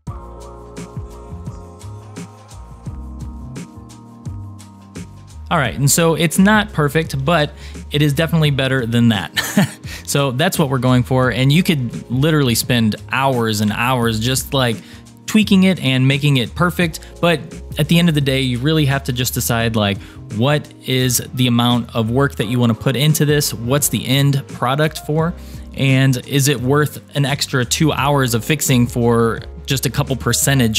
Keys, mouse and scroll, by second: 0.0-2.0 typing, 0.0 click, 0.2 click, 0.4 click, 0.5 click, 1.1 click, 1.7 shift+middle click, 1.9 shift+click, 2.6 click, 2.8 shift+middle click, 3.2 g, 3.5 click, 3.7 click, 3.7 g, 4.0 shift+middle click, 4.0 click, 4.3 click, 4.4 g, 5.3-7.3 shift+middle drag, 5.3 click, 5.3 scroll down 2, 7.6-11.1 middle drag, 11.8-12.5 scroll down 2, 13.1 middle click, 14.3 shift+middle click, 17.5-18.7 scroll up 3, 18.7-20.3 middle drag, 25.5-28.5 scroll down 2.